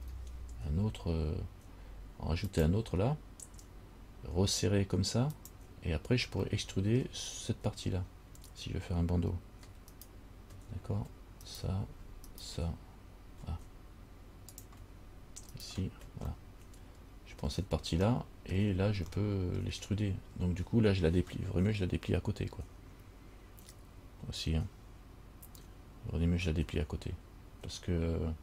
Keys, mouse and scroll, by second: 0.1 ctrl+r, 6.7 middle click, 10.1 alt+right click, 11.6 alt+right click, 12.5 alt+shift+right click, 14.7 click, 15.7 alt+right click, 16.5 middle click, 18.3 shift+middle click, 19.3 shift+middle click.